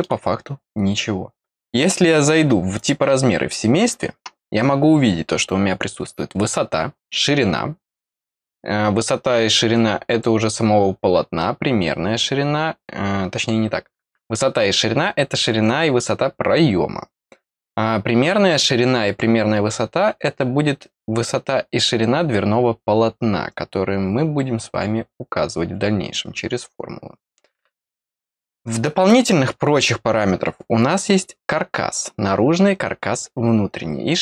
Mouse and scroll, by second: 2.7 click, 27.7-28.2 scroll down 1.